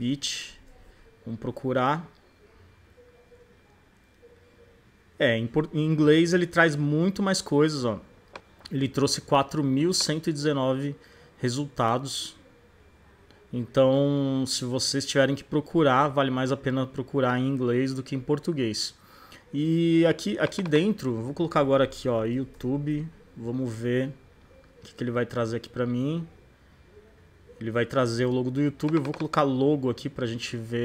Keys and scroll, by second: 0.0-0.3 typing, 0.5 Return, 21.4-22.8 typing.